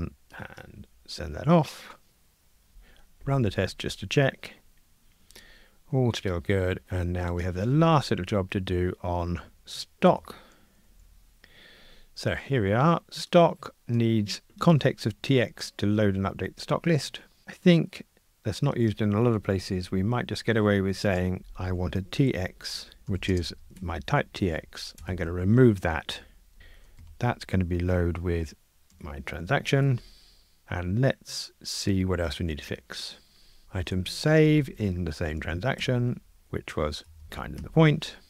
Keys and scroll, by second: 2.7 ctrl+r, 5.2 Escape, 9.6 super+o, 23.8 Escape, 25.0 super+BackSpace, 26.6 alt+shift+Right, 29.8 Escape, 32.5 F2, 33.6 alt+shift+Right, 35.8 Escape, 37.6 Escape.